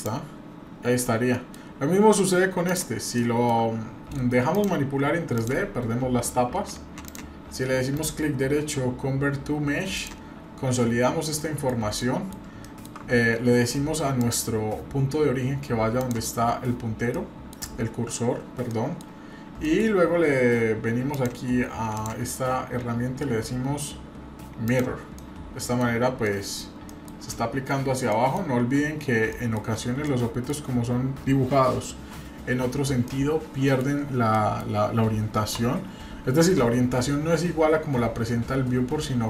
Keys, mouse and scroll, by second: 0.7 scroll down 2, 0.9-1.5 middle drag, 1.9 middle click, 1.9 scroll up 2, 2.7 click, 3.1 shift+middle click, 4.5 click, 5.3 click, 7.1 click, 7.9-10.0 right drag, 11.4-11.7 middle drag, 11.7-12.0 scroll down 1, 12.0 middle click, 12.6-12.9 shift+middle drag, 14.2-16.1 drag, 17.1-17.5 middle drag, 17.8 scroll up 1, 18.7 middle click, 19.6 middle click, 19.8-20.4 scroll up 1, 20.4-20.9 scroll down 1, 21.1 click, 24.7 click, 25.2-25.8 middle drag, 25.8-26.2 scroll down 2, 26.2-26.6 middle drag, 26.6-26.9 scroll down 1, 26.9 middle click, 28.1 middle click, 29.3 middle click, 29.8-30.1 scroll up 1, 30.1 middle click, 33.0-33.8 middle drag, 34.3 middle click.